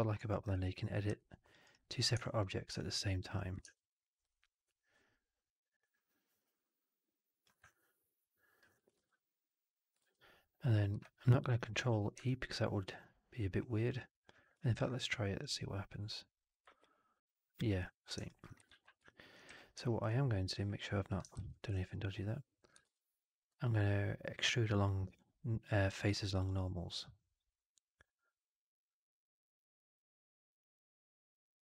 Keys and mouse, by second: 0.1 alt+right click, 0.4 3, 1.1 alt+click, 1.5 alt+right click, 1.7 alt+click, 2.7 alt+click, 3.5 shift+Tab, 7.6-8.6 alt+drag, 8.8 ctrl+e, 9.9 shift+Tab, 10.8 Escape, 11.5 alt+click, 11.8 w, 12.1-13.8 alt+drag, 14.6 ctrl+e, 15.3-16.4 drag, 16.7 alt+click, 18.2 alt+click, 18.6 ctrl+z, 19.0 alt+click, 19.4 w, 19.8 alt+click, 21.2 ctrl+z, 21.6 alt+click, 22.7 shift+Tab.